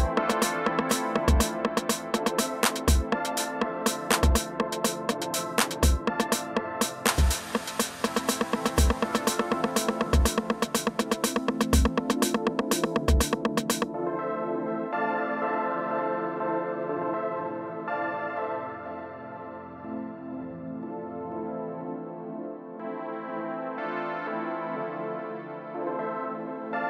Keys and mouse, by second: 0.5-1.7 drag, 3.6-4.7 drag, 6.9 alt+click, 7.4 alt+click, 9.9 alt+click, 11.2 click, 14.1-14.9 alt+drag, 15.3-16.1 alt+drag, 18.3-19.1 drag, 20.3 click, 20.6 click, 21.9 click, 23.5 click, 24.5 click, 26.7-26.8 drag.